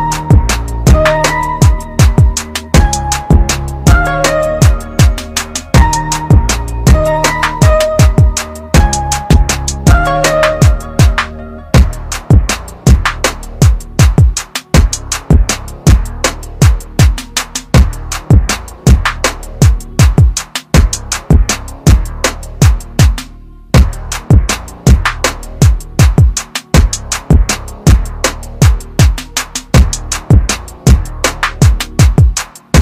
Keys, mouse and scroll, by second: 2.7 click, 7.3 click, 13.5 click, 16.3 ctrl+z, 18.0 typing, 18.9 click, 22.6 click.